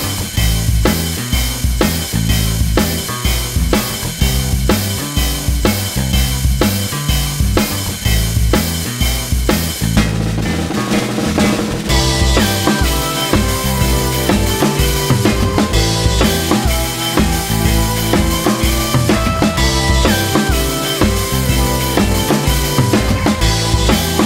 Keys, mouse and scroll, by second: 0.0-3.2 typing, 0.1 middle click, 0.3 scroll up 1, 0.4 middle click, 0.6 ctrl+z, 0.6 click, 1.1 scroll up 1, 1.1 middle click, 1.4 shift+click, 1.6 middle click, 1.8 shift+click, 1.9 scroll down 3, 1.9 middle click, 2.0 scroll up 1, 2.1 click, 2.3 middle click, 2.6 shift+click, 2.7 middle click, 3.0 middle click, 3.3-3.6 scroll up 4, 4.0 scroll down 2, 4.2-8.6 typing, 5.2 ctrl+z, 5.9 Tab, 6.0 middle click, 6.4 Tab, 6.5 scroll up 4, 6.5 shift+middle click, 7.3 click, 8.8 shift+middle click, 9.2 Tab, 9.4 scroll up 1, 9.5 click, 9.6 click, 9.6 shift+click, 9.7 middle click, 10.1 shift+click, 10.1 middle click, 10.2-14.0 typing, 10.6 click, 10.7 middle click, 10.9 middle click, 11.1 click, 11.1 middle click, 11.4 middle click, 11.6 click, 11.6 middle click, 12.4 alt+click, 12.6 scroll down 4, 12.7 middle click, 12.8 Tab, 13.1 middle click, 13.4 click, 13.6 scroll down 4, 13.7 middle drag, 13.9 scroll up 2, 13.9 click, 14.2 Tab, 14.3 middle click, 14.7 Tab, 14.8 shift+middle click, 15.0 scroll up 1, 15.1 middle click, 15.6 click, 15.7 scroll up 1, 15.7 middle click, 16.2-24.2 typing, 16.2 click, 16.7 middle click, 17.1 middle click, 17.6 middle click, 17.9 ctrl+z, 18.4 middle click, 18.9 scroll down 2, 18.9 middle click, 19.2 shift+click, 19.4 middle click, 19.9 click, 19.9 middle click, 20.2 middle click, 20.5 middle click, 20.9-21.4 scroll up 3, 21.1 click, 21.2 middle click, 21.5 shift+middle click, 21.9 scroll down 3, 22.0 shift+middle click, 22.0-22.4 scroll up 4, 22.7 alt+click, 23.0 scroll down 2, 23.2 middle click, 23.6 scroll up 3.